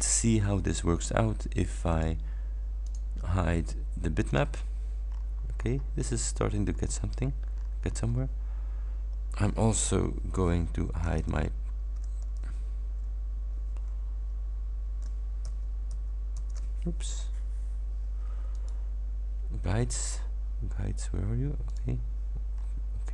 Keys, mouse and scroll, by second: 2.0 click, 3.0 click, 4.4 click, 5.2-6.3 scroll up 4, 6.4 scroll down 2, 6.8 scroll up 2, 7.6-8.4 scroll down 4, 8.7 scroll up 2, 11.3 ctrl+alt+ß, 12.4 ctrl+alt+ß, 15.5 ctrl+alt+ß, 18.6 click, 21.8 click, 22.6 scroll up 1.